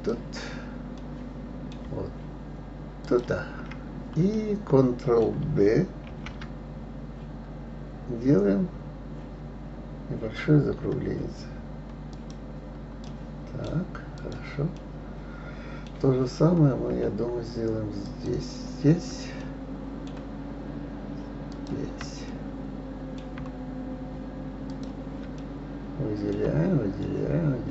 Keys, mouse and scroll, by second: 0.0 click, 1.1-3.0 middle drag, 3.0 shift+click, 4.3-6.0 middle drag, 6.0 ctrl+b, 13.1-14.7 right drag, 14.7-16.3 middle drag, 16.3 scroll up 2, 18.1 click, 19.4-21.5 shift+middle drag, 21.5 shift+click, 22.3-24.7 middle drag, 24.7 shift+click, 25.4-27.7 middle drag.